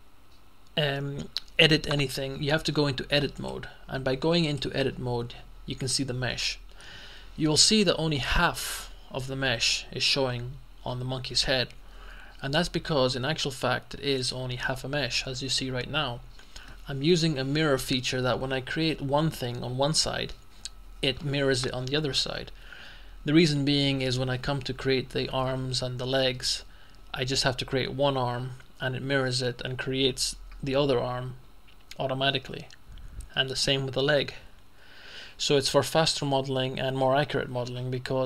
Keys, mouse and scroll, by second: 3.4 click, 4.5 click, 14.3 click.